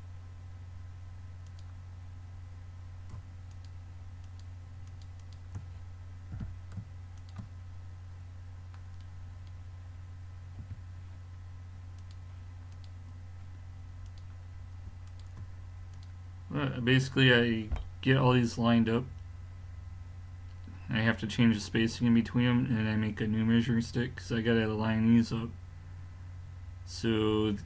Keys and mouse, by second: 3.5 click, 6.3 g, 8.9-9.3 middle drag, 10.6 a, 12.0-27.6 drag.